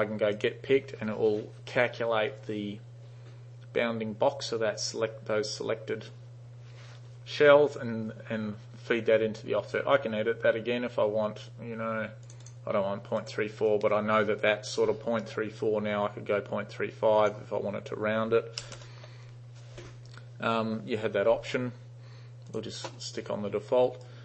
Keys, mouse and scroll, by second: 0.4 click, 12.3 click, 12.5 click, 13.3 click, 17.3 click, 18.7 BackSpace, 18.8-22.4 BackSpace, 19.1 5, 22.6 click, 24.1 alt+right click.